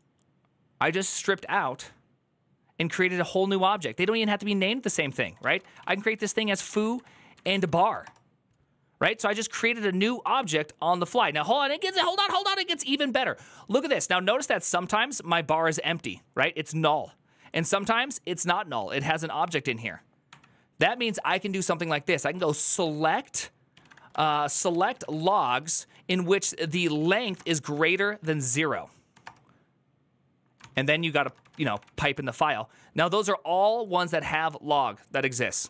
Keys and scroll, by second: 4.0 ctrl+Left, 4.1 ctrl+Left, 4.3 ctrl+Left, 4.4 ctrl+Left, 5.0 Left, 5.2-6.2 typing, 6.4 Right, 6.6 Right, 7.1 Right, 7.3-8.2 typing, 20.6 ctrl+w, 20.8 ctrl+w, 20.9 ctrl+w, 21.1 ctrl+w, 21.7-29.0 typing, 30.3-32.6 typing.